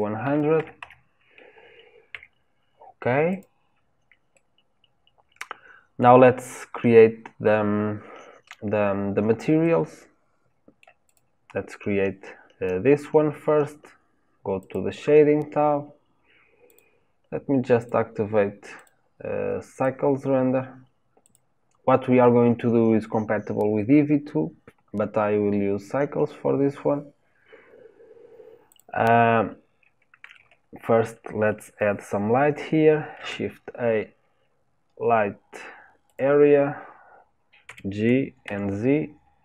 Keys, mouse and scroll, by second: 3.3 click, 4.3-7.4 middle drag, 9.6-11.0 middle drag, 11.0 click, 14.7 click, 16.7-17.7 drag, 21.3-28.8 drag, 37.7 g.